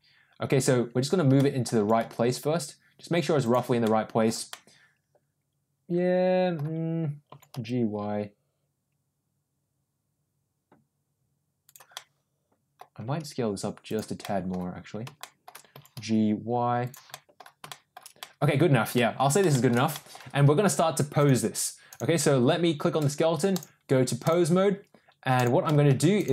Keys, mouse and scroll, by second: 1.3 middle click, 1.7 g, 3.8-4.2 middle drag, 4.4-6.5 middle drag, 7.2 g, 11.8-12.8 middle drag, 13.0 s, 14.1-14.4 middle drag, 15.2 shift+middle click, 15.6 g, 17.0 middle drag, 17.6 middle drag, 18.1 middle click, 18.9 middle click, 19.4 middle drag, 19.8 middle click, 21.1 click, 23.4-24.3 drag, 25.3 click, 25.6 middle click, 26.1 click.